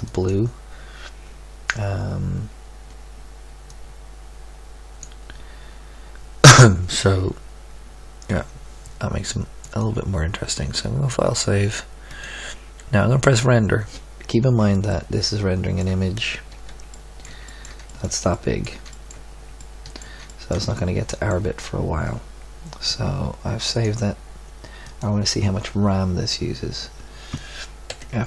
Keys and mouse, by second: 0.2-2.3 drag, 4.0-4.8 drag, 4.8-5.3 typing, 6.1-7.4 middle drag, 10.0 ctrl+q, 10.6-11.7 drag, 16.6 z, 22.6-23.6 middle drag.